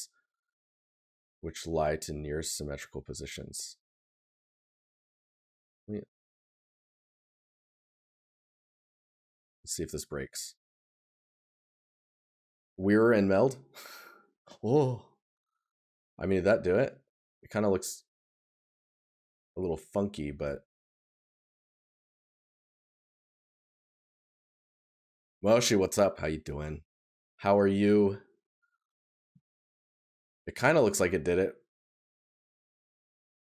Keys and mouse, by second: 15.7 right click, 21.2 right click, 22.7 right click, 29.5 right click, 31.5 right click.